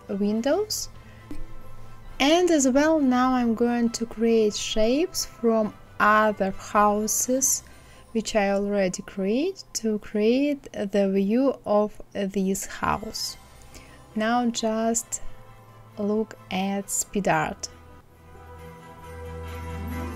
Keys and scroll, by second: 6.8 Left, 14.8 ctrl+z, 17.4 Up, 19.4 Up, 20.0 Up.